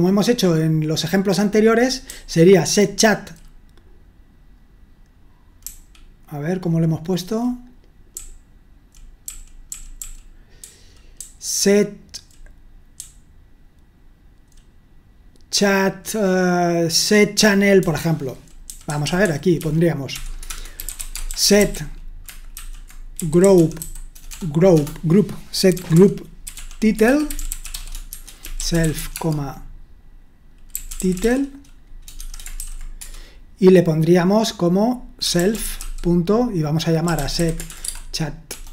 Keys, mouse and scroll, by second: 0.0-3.1 typing, 6.3-14.5 typing, 18.6-33.5 typing, 35.1-38.7 typing.